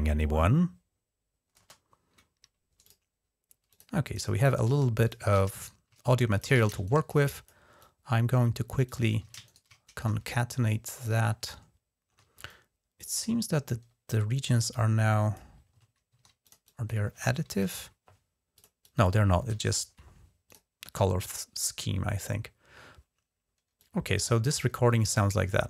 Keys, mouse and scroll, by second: 1.4 space, 2.6 click, 3.5 click, 3.8 click, 4.5-6.3 typing, 4.8 click, 5.4 shift+right click, 6.1 click, 7.0 click, 7.6-8.5 drag, 8.6 click, 9.0 typing, 9.2 shift+right click, 10.8 click, 11.6 ctrl+scroll up 1, 12.3-13.0 drag, 14.1-15.3 drag, 15.9 ctrl+z, 16.2 click, 17.4 alt+0, 18.3 click, 18.6 click, 19.4 0, 20.3 click, 23.6 click.